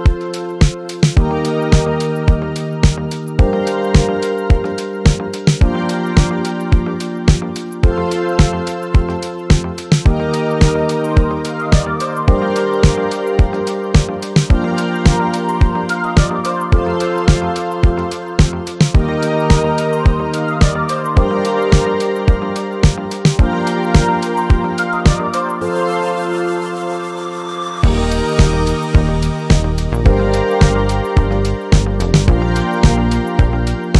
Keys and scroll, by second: 23.4-25.2 typing, 31.7 typing.